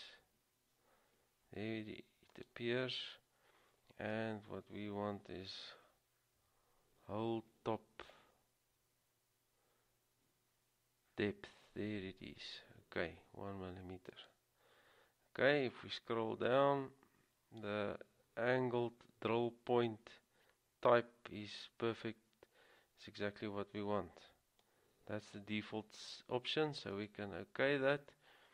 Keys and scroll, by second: 6.3-7.0 typing.